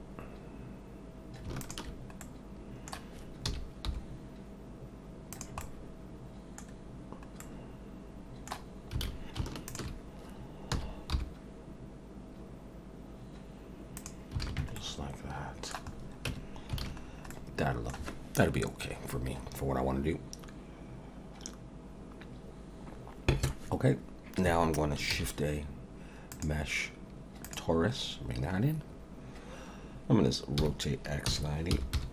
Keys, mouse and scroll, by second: 1.6 alt+shift+click, 2.2 middle click, 3.4 s, 5.6 middle click, 7.4 middle click, 9.0 alt+a, 9.7 alt+shift+click, 10.7 s, 14.4 alt+a, 14.8 middle click, 15.9 scroll down 2, 16.3 Tab, 16.8 alt+a, 17.0 scroll down 2, 17.3 middle click, 25.1 shift+a, 28.0 scroll down 1, 28.6 scroll up 2, 30.6 r.